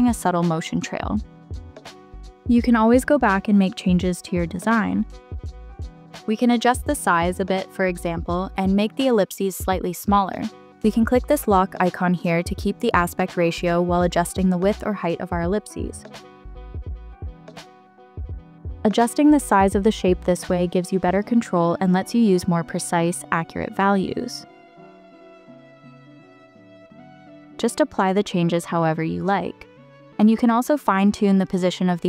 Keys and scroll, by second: 24.6-25.4 typing, 28.4 3, 28.6 Return.